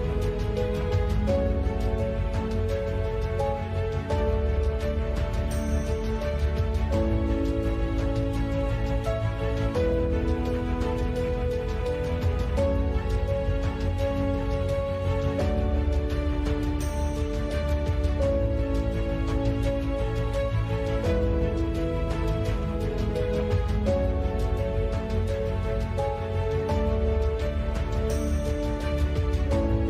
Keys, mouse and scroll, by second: 0.0-5.1 typing, 1.1-2.1 drag, 2.4 click, 5.1 ctrl+s, 5.3-5.9 drag, 5.7 Tab, 6.7 shift+s, 7.0 Tab, 7.1 Tab, 7.7 e, 9.6 click, 10.3 ctrl+b, 11.3 g, 11.9 z, 12.2 click, 12.5 alt+e, 14.8 Tab, 14.9 click, 15.4 ctrl+2, 16.4 Tab, 17.1 z, 17.5 i, 17.7 click, 18.1-19.3 drag, 18.7 i, 19.4 Tab, 19.6 Tab, 19.7 shift+s, 20.0 Tab, 20.1 shift+a, 21.2-23.3 typing, 24.4 s, 25.1-26.4 drag, 27.1 click, 27.3 KP_5, 27.7 g, 28.3 ctrl+s, 28.3 a, 28.4 click, 28.6 ctrl+2, 28.8 ctrl+z, 28.9 Tab, 29.2 Tab, 29.3 t, 29.5-29.8 drag, 29.7 t.